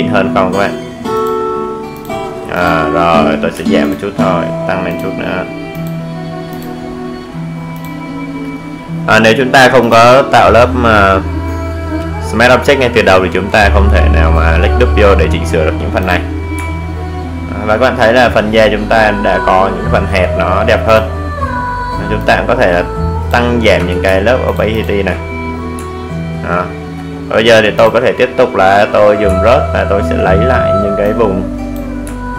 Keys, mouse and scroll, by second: 2.1 ctrl+space, 2.4 ctrl+click, 2.6 ctrl+space, 3.5 click, 15.2 click, 16.0-16.8 alt+scroll down 1, 16.8-17.4 alt+scroll up 1, 18.3-18.8 scroll, 18.8 alt+scroll down 1, 19.7-23.3 drag, 23.3 ctrl+space, 23.6 ctrl+click, 23.7 ctrl+space, 23.8 ctrl+click, 23.9 ctrl+space, 25.2-25.9 alt+scroll down 1, 26.6 click, 28.4 alt+scroll up 1, 29.7-31.0 drag, 31.0 alt+right click, 31.7 click.